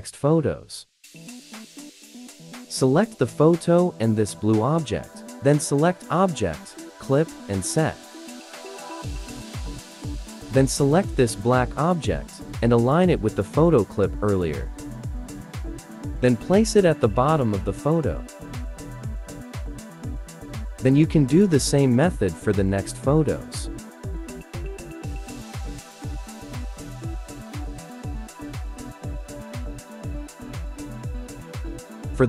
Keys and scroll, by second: 10.6 ctrl+d, 13.2 ctrl+shift+a, 28.5 ctrl+d, 29.1 ctrl+d.